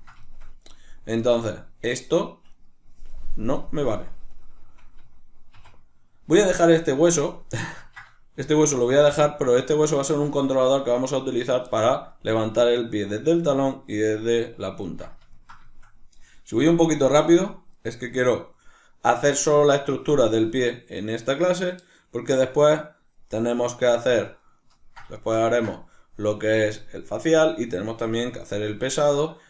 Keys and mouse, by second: 2.5 right click, 4.3 right click, 5.6 x, 6.5-8.9 middle drag, 6.9 Tab, 8.4 g, 8.9 right click, 10.1-17.3 shift+middle drag, 17.3 right click, 17.4 right click, 17.8 right click, 18.0 right click, 23.3-29.4 middle drag.